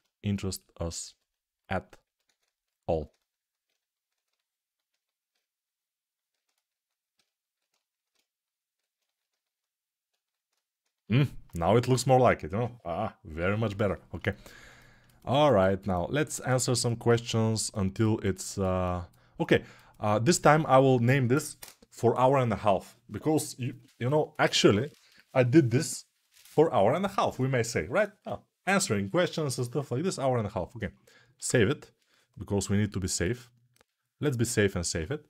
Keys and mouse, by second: 2.7 ctrl+z, 25.5-35.2 drag, 31.3 ctrl+s.